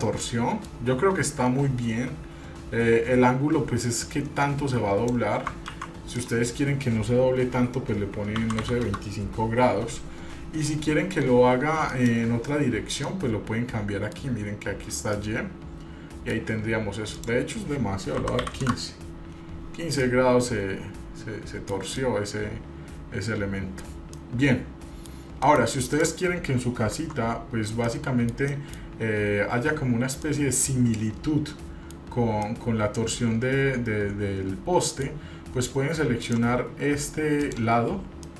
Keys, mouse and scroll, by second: 0.2-0.9 middle drag, 4.2-5.4 drag, 6.0 ctrl+z, 6.4-9.9 drag, 12.1 click, 13.2-14.4 middle drag, 15.4-16.5 middle drag, 17.3-19.6 drag, 20.2-22.0 middle drag, 22.2-24.1 middle drag, 24.3 middle click, 25.7 middle click, 26.1 click, 27.1 Tab, 28.1 middle click, 28.7 middle click, 29.1-30.1 scroll up 2, 30.4-32.2 middle drag, 30.4 scroll down 1, 32.6-35.2 middle drag, 36.4 click, 37.6 click.